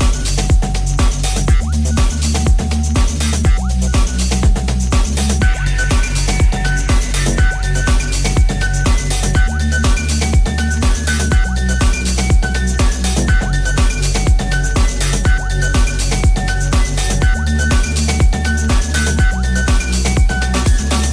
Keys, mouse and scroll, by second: 0.7-5.4 shift+drag, 1.0 shift+d, 5.4 middle click, 5.6 ctrl+middle click, 5.9 middle click, 6.6-8.6 shift+middle drag, 8.7 middle click, 9.6-13.3 middle drag, 13.4 shift+middle click, 14.3 right click, 14.4-17.7 shift+middle drag, 17.7-21.1 drag, 17.7 right click, 17.7 0, 20.5 middle click, 20.5 right click.